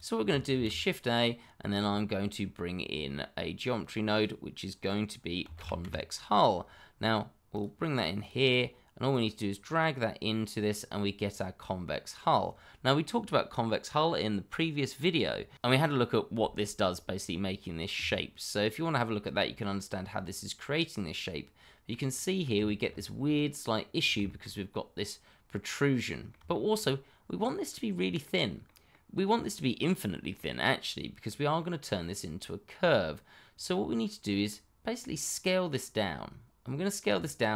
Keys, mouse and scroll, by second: 0.5 shift+a, 5.4 c, 5.5 o, 5.8 n, 7.5 click, 11.2-11.8 scroll up 1, 19.7 middle click, 22.8-23.2 shift+scroll up 1, 23.2 middle click, 24.0 scroll down 1, 24.2 shift+middle click, 25.6 middle click, 27.1 shift+middle click, 27.2-27.5 scroll down 1, 27.5 middle click, 34.4 middle click, 36.6-37.1 scroll up 1, 37.2 shift+middle click, 37.3 middle click, 37.4 shift+middle click.